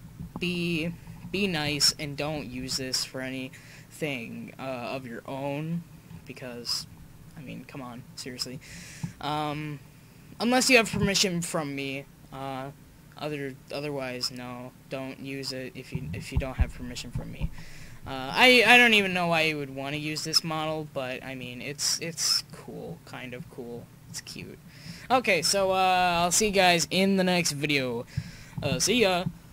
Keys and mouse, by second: 21.6-22.0 middle drag, 23.3 middle click, 24.4 drag, 24.8-25.4 middle drag, 25.8 middle click, 26.3 middle click.